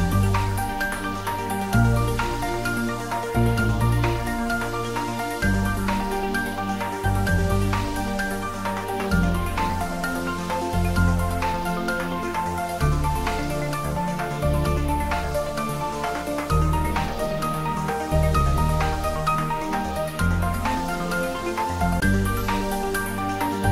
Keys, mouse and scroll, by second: 0.7 ctrl+e, 1.5 click, 2.3 ctrl+r, 3.2 click, 5.5 click, 6.5 ctrl+r, 7.1 click, 10.3 click, 13.0 g, 16.4 Left, 16.9 click, 17.4 scroll up 1, 20.0 click, 21.3 3, 22.0 alt+shift+click.